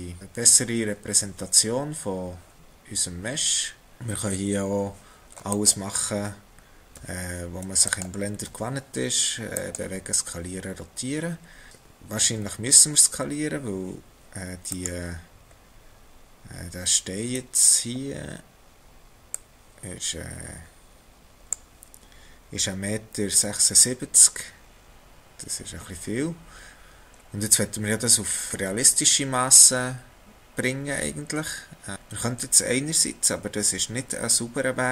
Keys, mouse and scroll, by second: 4.2 r, 7.0 s, 8.5 g, 10.6 scroll down 1, 12.3-14.8 scroll up 5, 14.8 click, 15.6-16.1 scroll up 2, 19.3 click, 24.8 x, 26.7 scroll up 5, 31.9 shift+middle click.